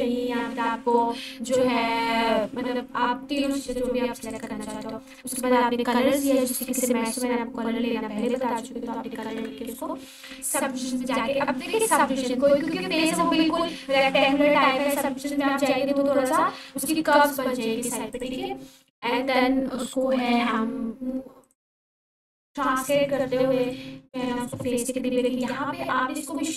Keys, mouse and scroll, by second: 8.3 2, 9.3 Return, 11.6-12.5 scroll down 1, 12.5 g, 13.1 y, 14.1 click, 14.6 r, 15.9 x, 17.1 9, 18.1 click, 19.2-20.9 typing, 21.4 click, 21.9-22.5 scroll up 1, 22.5-23.4 click, 23.7-24.2 alt+shift+drag, 26.3 g.